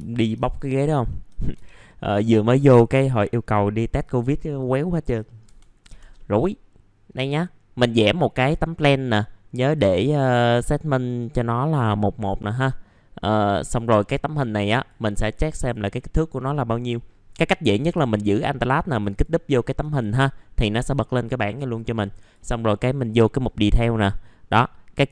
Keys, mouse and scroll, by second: 0.4 click, 1.0 middle click, 1.8 middle click, 1.9-2.4 scroll down 1, 2.4 middle click, 2.9 ctrl+right click, 4.0 click, 5.2 middle click, 5.4 F3, 6.1 middle click, 13.4 click, 18.9 alt+click, 19.1 alt+click, 22.2-25.1 drag.